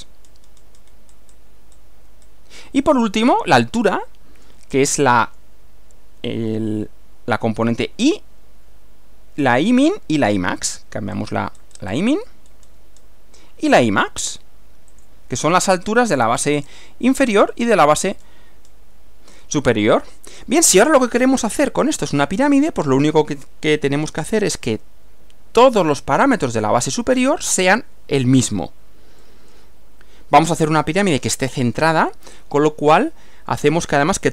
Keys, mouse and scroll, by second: 0.3-1.1 scroll down 2, 1.1-1.5 scroll up 2, 1.8-2.4 scroll up 4, 3.3-4.7 middle drag, 10.6 click, 11.2-12.1 scroll up 4, 12.5-13.2 scroll down 4, 15.0 click, 15.8-16.8 scroll up 4, 16.8 scroll up 1, 17.5-17.9 scroll down 2, 18.0-18.4 scroll down 2, 18.7 scroll down 2, 20.1 middle click, 21.0-23.1 middle drag, 23.4-24.7 middle drag, 29.2-30.7 middle drag, 32.4-33.8 middle drag.